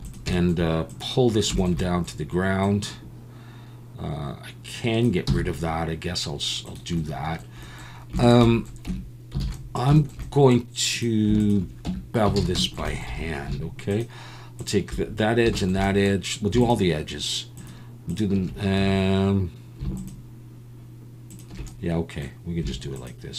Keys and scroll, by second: 5.3 x, 8.9 Tab, 9.4 alt+a, 11.9 Tab, 12.4 alt+a, 13.1 2.